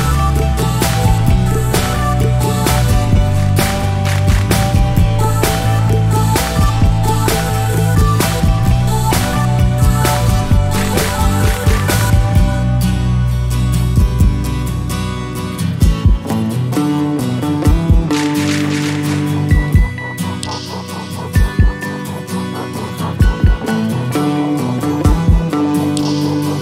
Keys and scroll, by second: 11.5 ctrl+v.